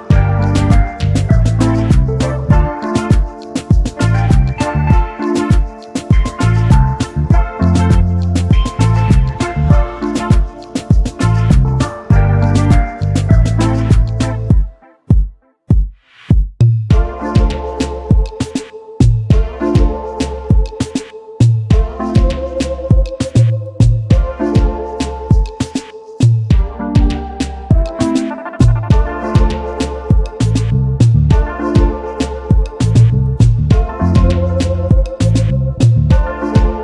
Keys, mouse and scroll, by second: 0.8 alt+scroll down 1, 1.5 alt+scroll down 2, 1.7 space, 2.9 double click, 6.7-7.3 alt+scroll up 1, 7.4 alt+scroll down 1, 9.2 alt+scroll down 1, 9.2 alt+scroll up 1, 9.6 space, 10.8 double click, 15.9 alt+click, 18.1-18.8 alt+scroll up 1, 18.9 alt+click, 21.0 double click, 21.2 alt+scroll down 1, 21.4 space, 21.7 scroll down 2, 21.9 space, 22.4 alt+scroll down 1, 25.2 right click, 32.6 alt+scroll down 2, 33.9 alt+scroll up 1, 34.7 alt+scroll up 1, 35.0-35.4 alt+scroll down 4, 35.5 space, 36.2 alt+scroll down 1, 36.4 space.